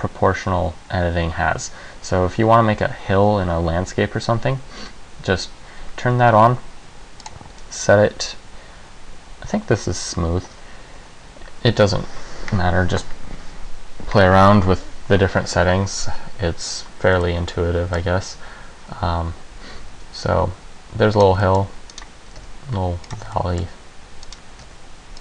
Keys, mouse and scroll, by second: 7.4 click, 17.4 middle click, 19.8 g, 21.4 click, 21.6 middle click, 22.1 right click, 22.4 g, 23.3 click, 23.6 middle click, 24.4 right click, 24.7 g.